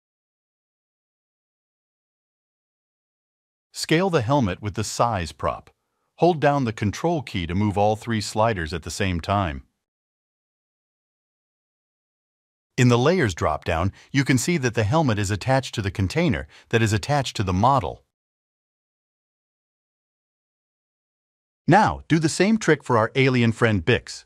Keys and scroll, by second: 0.2 0.